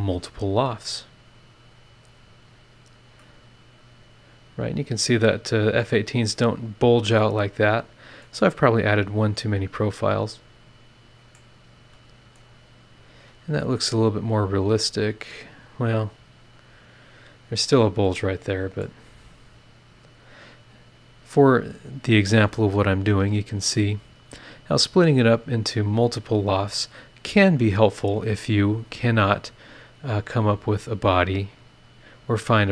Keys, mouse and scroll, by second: 0.3 click, 2.1 click, 2.4-4.7 middle drag, 3.3 click, 3.3 right click, 4.7-8.4 drag, 4.7-8.4 right drag, 9.3 right click, 10.2 click, 11.3 middle click, 11.4-12.5 drag, 11.4-12.5 right drag, 12.5 scroll down 2, 13.0-13.6 scroll up 4, 13.6-19.0 middle drag, 13.7-19.0 drag, 13.7-19.0 right drag, 19.7 click, 20.3 scroll down 2, 21.0 scroll up 2, 22.7-23.2 scroll down 4, 24.2 click, 24.9 scroll down 2, 25.5 click, 25.9 space, 28.9 click, 30.4 click, 31.5 click.